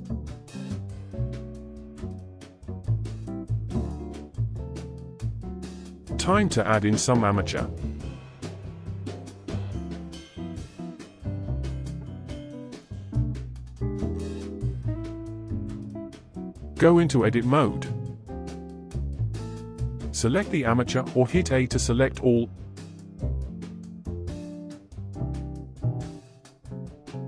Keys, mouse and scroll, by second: 4.2 Tab, 5.3 shift+a, 10.7-13.8 middle drag, 13.8 KP_1, 14.6-14.9 scroll down 3, 15.6-16.5 shift+middle drag, 16.5-17.1 scroll up 1, 17.1 alt+z, 18.9 Tab, 20.3 click, 24.9-26.4 scroll down 5, 26.7 click.